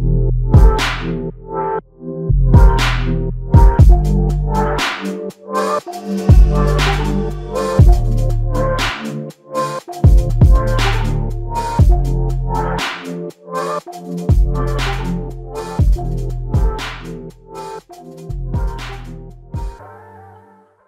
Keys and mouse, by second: 4.7 shift+click, 5.9 shift+click, 10.8 alt+click, 13.1 f, 17.2 shift+click, 19.1 alt+shift+click, 20.1 alt+click.